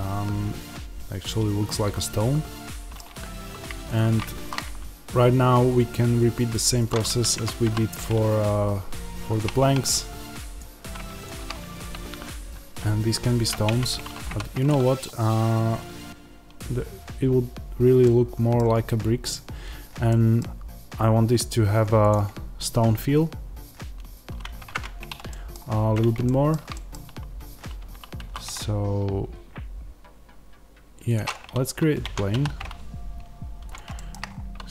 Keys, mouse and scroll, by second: 3.7 shift+right click, 7.2 Tab, 7.5 s, 10.4 click, 11.1 shift+click, 13.5 Tab, 14.6 x, 17.9-22.0 middle drag, 18.8-20.0 scroll down 2, 24.6-34.7 middle drag, 31.9 Tab, 32.2 s, 33.6 click, 34.1-34.7 scroll.